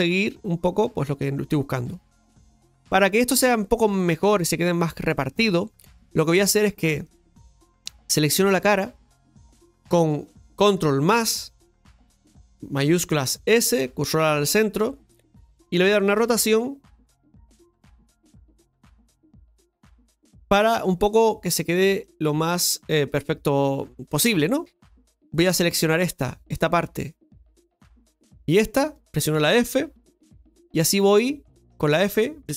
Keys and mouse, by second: 7.0 click, 8.4 right click, 13.3 shift+s, 24.4 shift+middle click, 25.6 right click, 27.2 click, 27.9 right click, 28.8 shift+right click, 29.9 f, 31.7 right click.